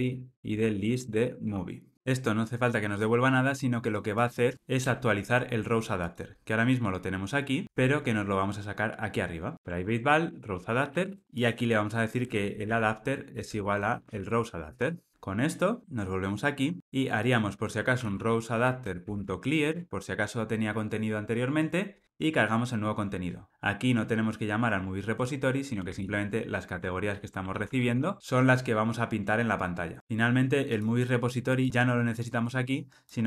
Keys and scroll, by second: 7.6 super+x, 13.3 Return, 18.9 Return, 26.7 Tab, 27.4 alt+super+l, 27.9 ctrl+alt+o.